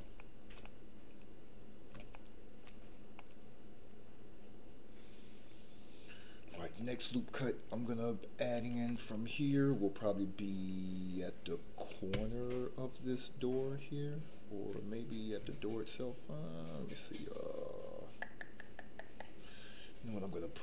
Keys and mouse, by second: 0.2 shift+middle click, 0.6-2.0 middle drag, 2.2 shift+middle click, 3.2-6.5 middle drag, 8.5 ctrl+r.